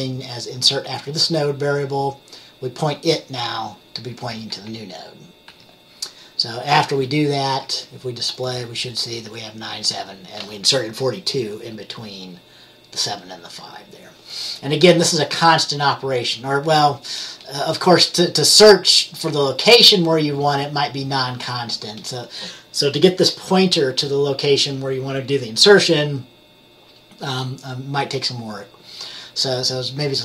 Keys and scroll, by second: 4.8 F10, 5.6 F10, 7.6 F10.